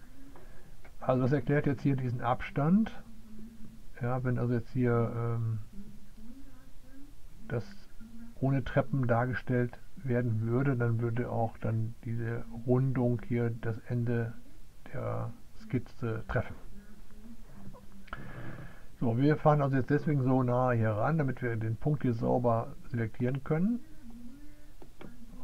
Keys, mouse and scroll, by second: 25.0-25.4 drag.